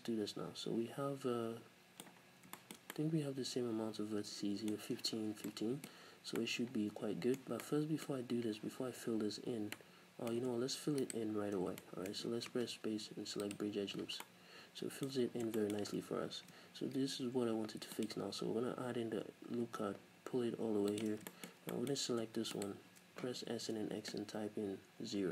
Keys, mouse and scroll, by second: 2.2 scroll down 2, 11.0 alt+right click, 11.6 scroll down 1, 11.8-15.2 middle drag, 12.5 space, 15.2-15.6 scroll up 1, 15.6 shift+middle click, 16.3 ctrl+r, 21.1 shift+click, 21.3-22.6 shift+middle drag, 22.6 shift+right click, 23.4 s.